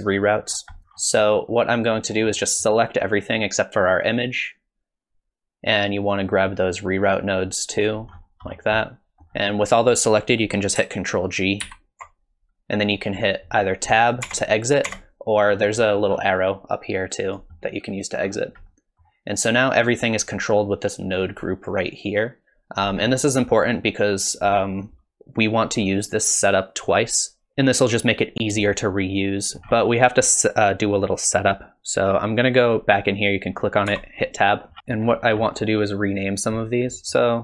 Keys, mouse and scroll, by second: 0.5-2.4 scroll down 13, 0.8 middle click, 2.4 middle click, 4.4 click, 8.2-9.4 scroll up 10, 8.8 middle click, 11.7 ctrl+g, 14.3 Tab, 14.9 Tab, 15.4-17.3 scroll down 12, 17.3 click, 17.3 scroll down 1, 18.2-19.2 scroll up 6, 18.7 middle click, 21.4 middle click, 23.8 click, 24.6-25.4 scroll up 1, 25.4-26.4 scroll up 2, 28.7 shift+middle click, 32.7 click, 33.9 Tab, 34.7-35.4 scroll down 11, 35.1 middle click, 35.1-36.1 scroll up 12, 36.1 click, 36.9 middle click.